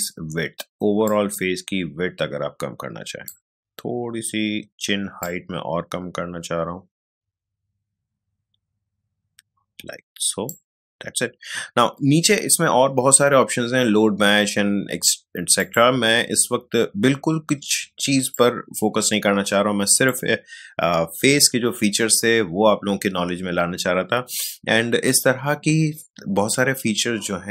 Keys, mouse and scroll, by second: 15.5 click, 18.3-22.5 drag.